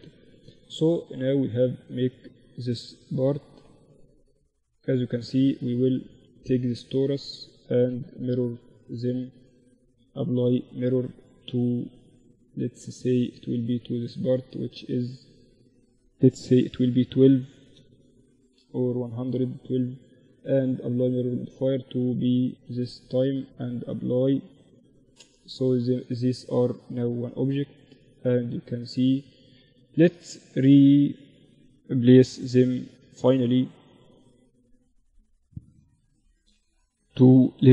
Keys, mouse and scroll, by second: 4.2-7.1 right drag, 8.2-11.2 drag, 12.7-16.6 right drag, 14.4-18.6 drag, 18.6-20.5 right drag, 19.8-22.7 drag, 23.0-24.8 drag, 24.4 Tab, 25.0 a, 25.2 a, 25.5 a, 26.0 Tab, 26.9-28.2 middle drag, 27.8 Tab, 28.8 a, 29.2 Tab, 29.9 a, 30.4 a, 30.8 a, 31.4 b, 36.3 m.